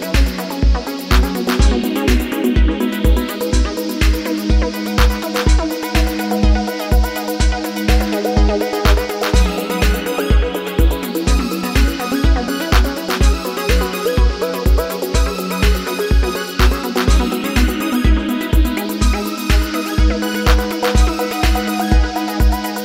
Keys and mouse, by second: 0.8 s, 4.0 Tab, 5.6-6.8 drag, 6.8-8.5 ctrl+middle drag, 8.5 click, 9.6 g, 11.3 g, 13.8 g, 15.7 drag, 16.2 g, 18.1 g, 20.5 drag, 21.0 g.